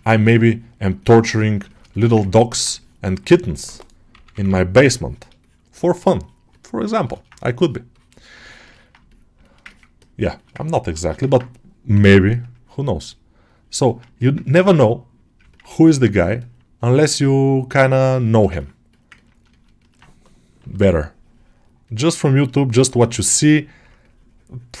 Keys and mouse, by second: 0.2-1.4 drag, 1.5 alt+shift+middle click, 2.1 ctrl+alt+middle click, 2.6 shift+click, 4.6 click, 5.3-6.4 shift+drag, 6.9 alt+shift+middle click, 7.2 click, 8.3 ctrl+alt+middle click, 8.6 alt+middle click, 8.9 shift+middle click, 9.3 alt+shift+middle click, 9.5 ctrl+alt+middle click, 10.2 alt+shift+middle click, 10.5 ctrl+alt+middle click, 10.9 alt+shift+middle click, 11.1-12.4 ctrl+alt+middle drag, 12.4 click, 12.8 click, 13.3 click, 13.7 ctrl+middle click, 14.1 ctrl+alt+middle click, 14.7 click, 15.4 ctrl+alt+middle click, 15.7 click, 16.2 alt+middle click, 16.6 click, 17.0 click, 18.1 alt+shift+middle click, 18.4 ctrl+alt+middle click, 19.0 ctrl+middle click, 19.4 alt+shift+middle click, 20.9 click, 21.7 click, 22.8 shift+middle click, 23.9 click.